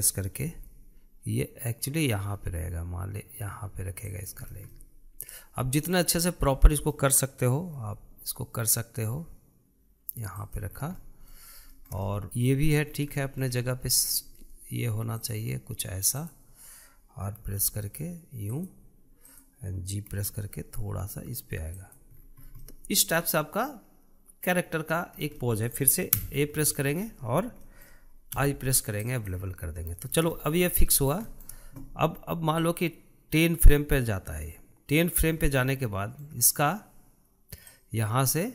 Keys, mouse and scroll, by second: 1.0 g, 5.0 scroll down 1, 5.3-8.4 middle drag, 8.4 g, 11.3 scroll down 4, 11.5-13.3 middle drag, 13.3-13.9 scroll up 6, 13.9-15.9 shift+middle drag, 15.9 click, 16.8 click, 18.2 r, 19.9 click, 20.8 g, 22.8-23.3 scroll down 6, 23.3-25.8 middle drag, 25.8 scroll down 2, 26.1-26.9 middle drag, 26.9 a, 27.3 middle click, 27.7-28.3 scroll up 3, 28.3 shift+middle click, 29.0 i, 30.6-31.3 shift+middle drag, 31.3 scroll up 2, 31.6-33.4 shift+middle drag, 33.4-36.3 drag, 36.3-38.4 shift+middle drag, 38.4-38.5 drag.